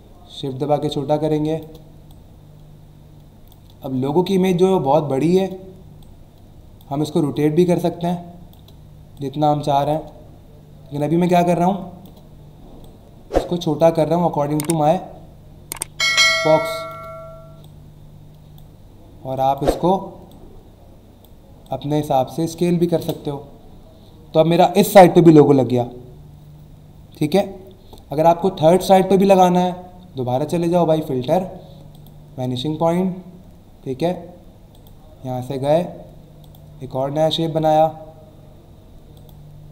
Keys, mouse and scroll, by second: 4.3 shift+click, 6.0 click, 7.3 shift+click, 9.2 click, 11.0 shift+click, 12.8 click, 16.0 shift+click, 17.6 click, 19.3 click, 20.3 click, 23.0 Return, 30.6 click, 31.9 click, 34.7 click, 36.4 click, 37.6 click, 39.1 click.